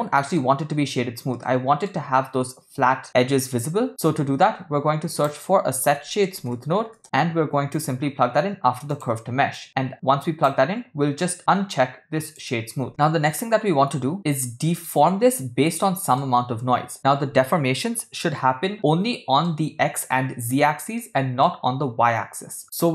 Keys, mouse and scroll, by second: 1.5-1.9 ctrl+shift+middle drag, 4.2 shift+a, 9.6 click, 12.2 click, 14.2-14.9 middle drag, 16.2-19.4 middle drag, 21.0-21.6 middle drag, 22.8 middle click.